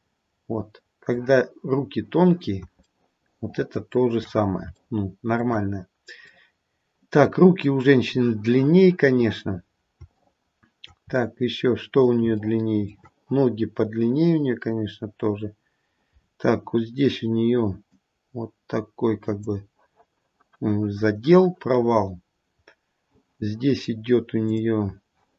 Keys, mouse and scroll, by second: 0.2 middle click, 2.8 shift+middle click, 3.6 shift+middle click, 4.2-4.6 scroll down 2, 5.3 shift+middle click, 6.6 middle click, 7.3 middle click, 10.2 shift+middle click, 16.1-17.8 scroll up 4, 17.8 click, 21.8-22.5 scroll up 1, 22.5-23.5 scroll down 1, 24.5 click.